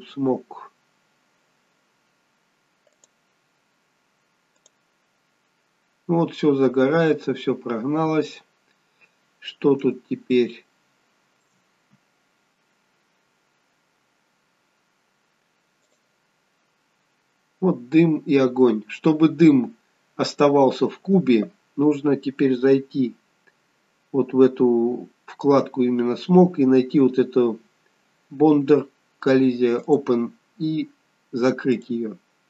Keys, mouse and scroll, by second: 2.1 scroll down 1, 3.0 click, 4.6 click, 7.7-8.2 scroll down 2, 8.7-10.2 scroll up 1, 10.2 scroll up 2, 10.7 shift+middle click, 14.5-16.0 scroll down 1, 16.0 click, 18.6 scroll down 2, 24.1-27.3 scroll up 2, 29.9 click.